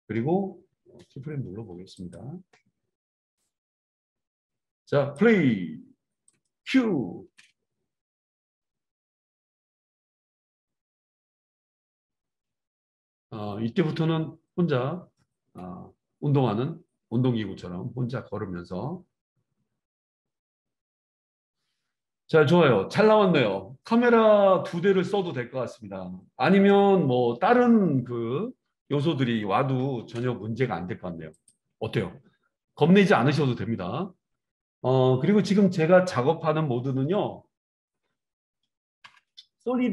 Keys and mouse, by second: 2.1-3.3 middle drag, 3.3-6.0 drag, 6.0 right click, 6.4-39.9 middle drag, 7.3 space, 29.9 space, 31.4 drag.